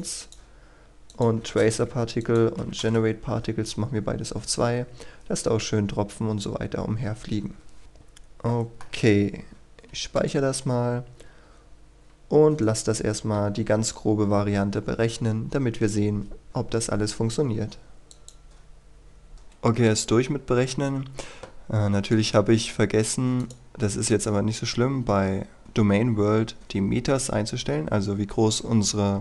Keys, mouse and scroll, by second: 1.4 KP_2, 1.6 Return, 2.2 click, 2.6 KP_2, 2.8 Return, 6.4-7.8 scroll up 1, 7.8 middle click, 10.1 click, 10.8-11.4 scroll down 1, 11.4-12.6 scroll up 1, 12.6 right click, 18.1-19.2 drag, 19.3 F9, 19.9-21.0 drag, 22.6-23.4 scroll down 1, 23.4 click, 24.9-26.6 scroll down 1.